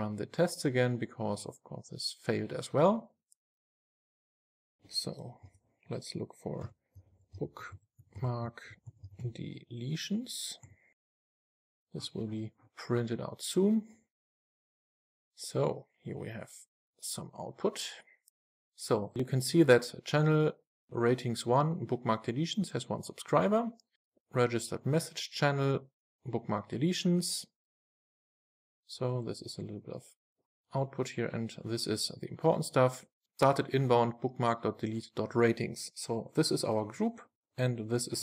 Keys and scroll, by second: 5.7 super+f.